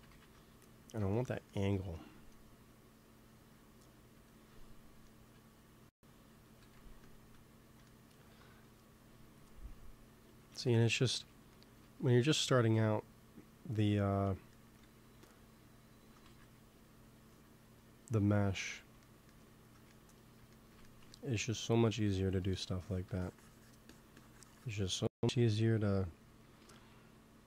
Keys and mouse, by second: 0.0 ctrl+z, 2.6-4.3 drag, 6.4 x, 6.6 f, 9.6-11.4 drag, 10.5 ctrl+z, 11.6 middle click, 14.2 middle click, 14.8 f, 15.3-18.6 drag, 16.2 ctrl+z, 19.5-21.9 middle drag, 21.9 f, 22.5 click, 25.2 KP_3, 26.3 g, 26.5 f, 27.1-27.4 drag.